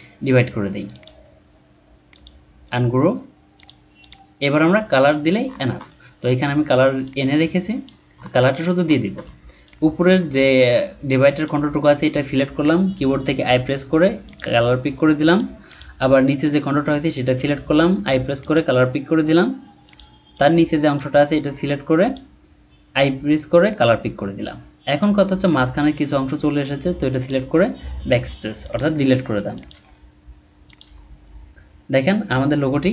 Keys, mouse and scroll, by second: 2.7 right click, 4.0 double click, 5.5-6.1 alt+scroll down 1, 6.1-8.1 ctrl+scroll up 4, 8.2-8.5 alt+scroll up 1, 9.0-9.4 alt+scroll up 1, 13.4 i, 15.7 double click, 17.9 typing, 20.3 double click, 22.9 i, 27.8 BackSpace, 28.8 BackSpace, 29.7 BackSpace, 30.8 BackSpace.